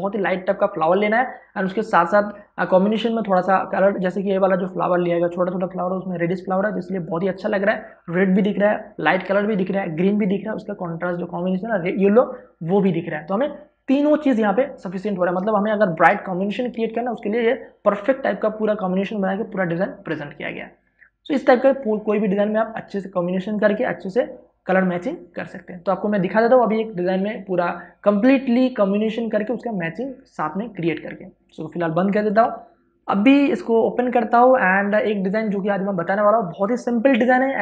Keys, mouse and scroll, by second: 16.6 click, 16.8 space, 33.0 ctrl+o.